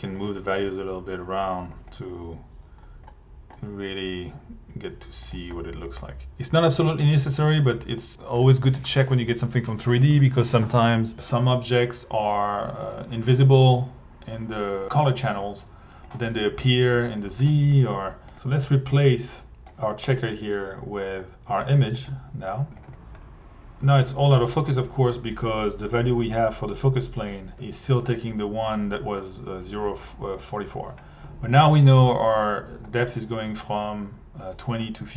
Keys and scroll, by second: 14.8 1, 22.0 1, 22.8 1.